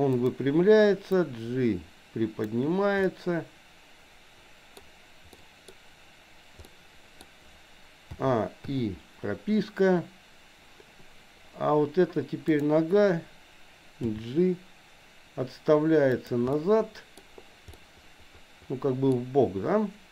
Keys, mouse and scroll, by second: 1.1-2.6 drag, 3.1-4.8 middle drag, 5.3 scroll up 1, 5.5 middle click, 6.6 middle click, 6.6 scroll up 1, 8.1 a, 8.7 i, 12.6 click, 14.1 g, 16.5 middle click, 16.5 scroll up 1, 17.2 scroll down 1, 17.7 scroll up 1, 17.8-19.2 middle drag.